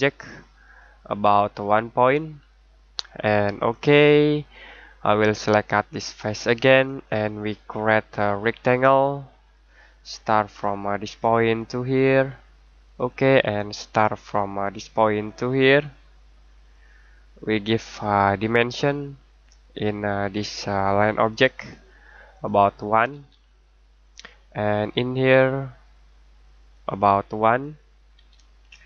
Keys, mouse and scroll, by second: 3.5 click, 23.1 1, 24.0 click, 26.7 click, 28.1 1.